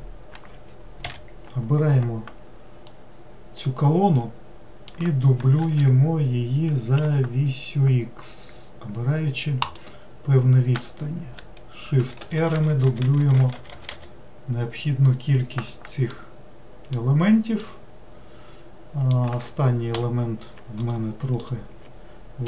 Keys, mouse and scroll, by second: 2.9-5.7 middle drag, 5.7 shift+d, 10.4-12.0 scroll down 1, 12.0-13.7 shift+r, 14.1 shift+r, 16.1-19.9 middle drag, 20.8 click, 21.4 click.